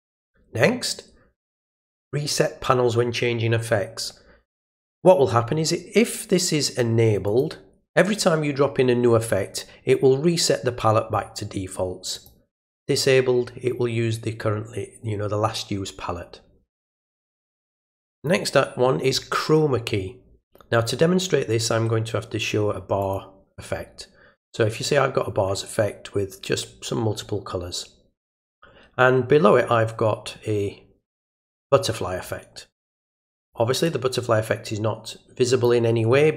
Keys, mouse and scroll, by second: 7.3 click, 12.1 click, 18.2 click, 23.0 click, 31.4 click, 33.2 click, 33.8-35.6 drag.